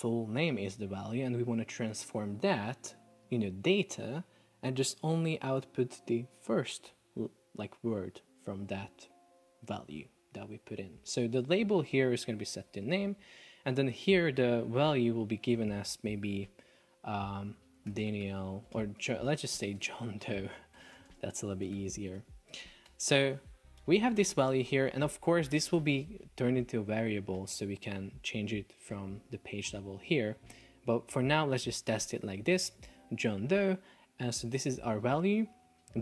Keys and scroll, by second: 12.2 shift+n, 12.9 Return, 17.8 shift+d, 18.8 super+BackSpace, 19.1 shift+j, 19.8 BackSpace, 21.2 space, 21.6 shift+d, 22.2 BackSpace, 23.0 Return, 23.6 BackSpace, 24.2 BackSpace, 24.9 Return.